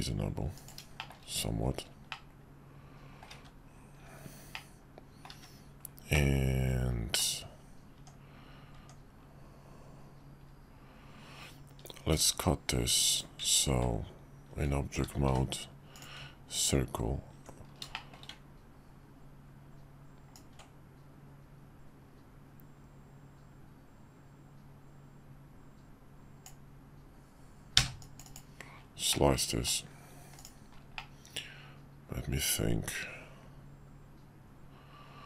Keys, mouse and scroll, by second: 1.1 shift+middle click, 2.2-3.2 middle drag, 4.5-5.3 middle drag, 5.3 `, 6.2-7.2 middle drag, 7.9 Tab, 12.1 shift+v, 13.2-13.5 drag, 15.2 d, 17.9 shift+drag, 20.3-28.3 ctrl+drag, 29.1-29.6 middle drag, 30.3 click, 30.9-35.2 middle drag.